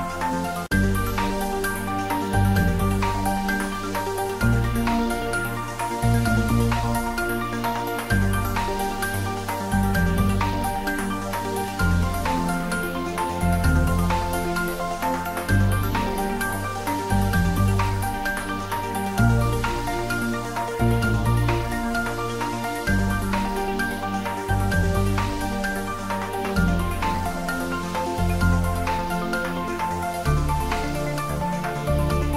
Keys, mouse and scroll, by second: 1.0 ctrl+3, 1.9 shift+click, 2.3-3.7 typing, 6.1 Return, 6.6-7.8 typing, 8.0 Return, 8.6-10.3 ctrl+middle drag, 10.0-11.2 typing, 11.4 Return, 13.1 click, 13.8-16.2 typing, 15.0 click, 17.0 Return, 17.8-18.7 typing, 19.1 Return, 19.7 click, 20.1 ctrl+s, 21.6 click, 23.1-24.0 typing, 25.2 Return, 25.8 click, 26.3 ctrl+s, 27.9 click, 29.5 shift+click, 30.1 g, 31.1 y, 31.6 Left.